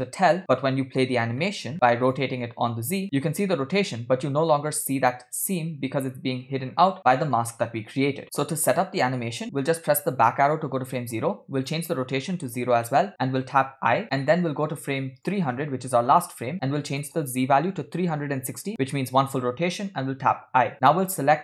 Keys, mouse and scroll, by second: 0.4 middle click, 0.4 scroll down 2, 1.7 middle click, 1.7 scroll up 3, 2.3 click, 3.6-8.3 drag, 8.8 click, 10.3 Left, 11.6-12.7 drag, 14.2 scroll down 2, 15.6-18.7 drag, 20.1 i, 21.1 click.